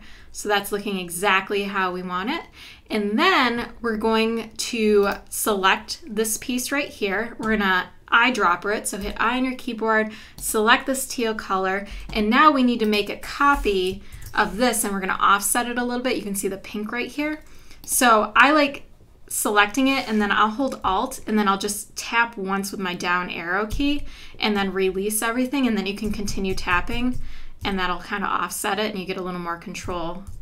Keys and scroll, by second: 9.0 i, 11.9 v, 14.1 super+=, 23.7 alt+Down, 26.1 Down, 27.6 Left, 29.9 Down, 30.3 Right.